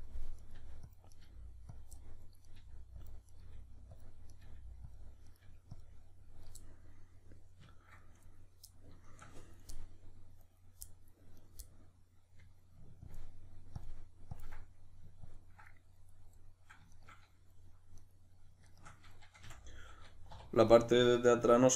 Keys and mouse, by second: 0.4 right click, 0.5 g, 0.9 click, 1.1 right click, 1.2 g, 1.8 click, 2.0 middle click, 2.5 right click, 2.6 g, 3.1 click, 3.3 right click, 3.5 g, 4.0 click, 4.3 right click, 4.4 g, 4.9 click, 5.3 right click, 5.5 g, 5.8 click, 6.6-11.4 middle drag, 11.4 right click, 11.7-13.1 middle drag, 13.1-14.6 ctrl+drag, 14.6-15.3 middle drag, 15.3-15.7 ctrl+drag, 15.7-16.9 middle drag, 16.9 shift+right click, 18.0 right click, 18.7 shift+right click, 19.5 f, 19.7-20.7 middle drag, 20.3 2, 20.7 right click.